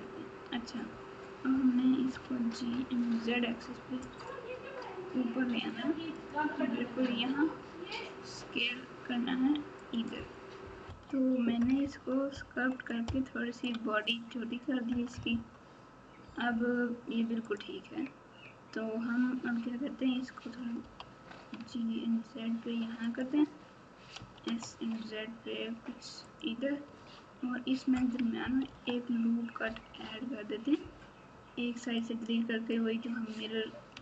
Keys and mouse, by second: 2.1 g, 10.8 KP_Multiply, 11.6 KP_Add, 13.0 KP_Subtract, 13.5 KP_Subtract, 13.9 KP_Subtract, 14.9 KP_Add, 15.1 KP_Add, 20.8 g, 24.1 s, 26.8 Tab, 28.6 ctrl+r, 32.0 click, 33.9 x.